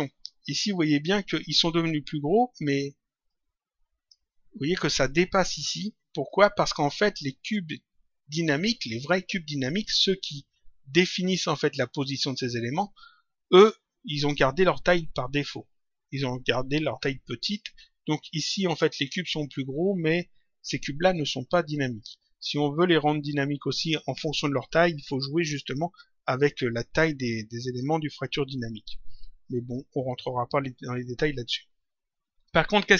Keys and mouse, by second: 3.2 click, 6.2 click.